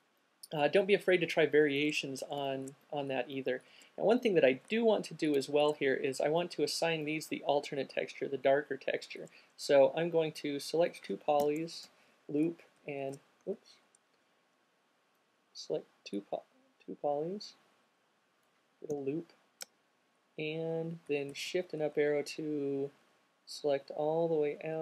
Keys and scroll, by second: 19.2 l, 20.2 Up, 20.9 Up, 21.0 Up, 21.4 Up, 23.1 shift+Up, 23.2 shift+Up, 23.5 shift+Up, 23.6 shift+Up, 23.7 shift+Up, 24.0 shift+Up, 24.1 shift+Up, 24.2 shift+Up, 24.5 shift+Up, 24.6 shift+Up.